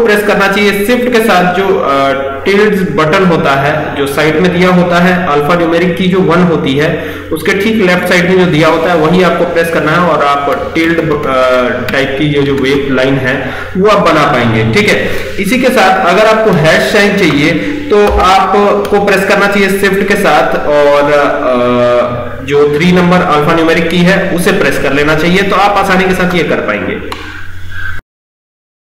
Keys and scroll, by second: 7.3 shift+`, 20.0 shift+3.